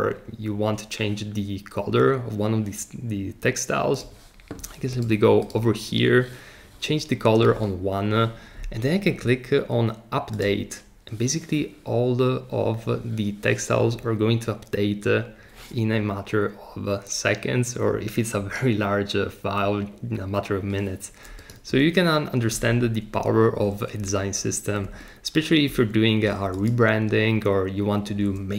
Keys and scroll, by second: 22.5 super+z, 24.8 super+z, 25.7 super+z.